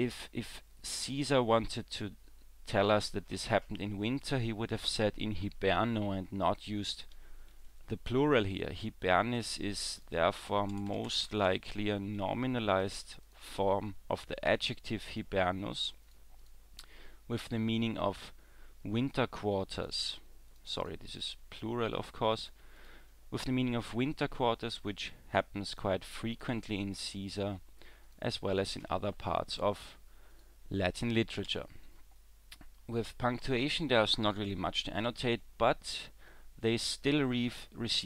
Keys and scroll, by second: 31.5 w.